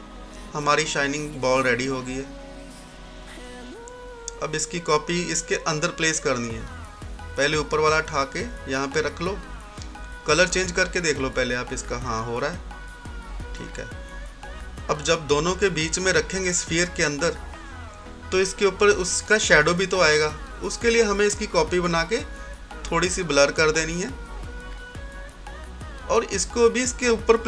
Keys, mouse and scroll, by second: 1.2 scroll down 1, 2.0 scroll up 1, 3.5-4.3 typing, 5.7-7.6 drag, 7.6 right click, 9.2 scroll down 1, 9.7-11.2 scroll up 1, 11.2 click, 12.2 scroll up 1, 14.1-14.8 typing, 14.8 click, 25.7-27.4 drag.